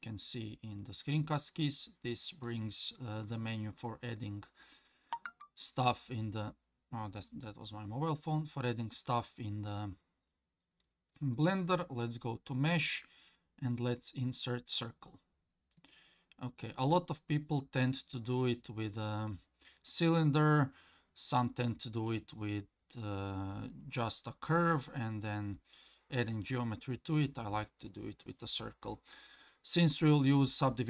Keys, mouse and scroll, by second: 25.9 click, 29.3 click.